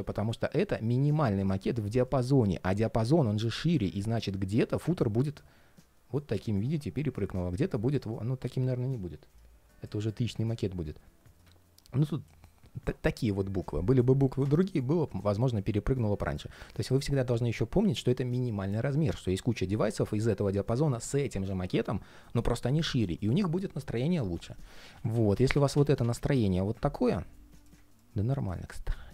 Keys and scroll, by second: 24.6 super+z.